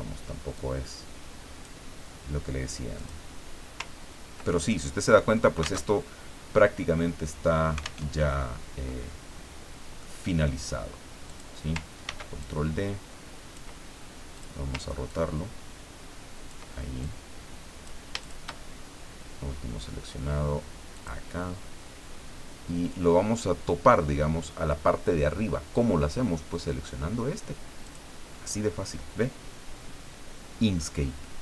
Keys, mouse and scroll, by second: 0.6-1.8 drag, 3.0 click, 3.9-4.6 ctrl+scroll down 4, 4.6 ctrl+middle click, 5.9 alt+Tab, 8.0 alt+Tab, 10.0-11.1 drag, 11.2 click, 12.0 ctrl+d, 12.4-13.7 ctrl+drag, 14.3 click, 15.1-16.7 ctrl+drag, 17.0-18.1 ctrl+drag, 18.2 shift+click, 20.9 click, 27.8 click, 29.9 scroll down 1.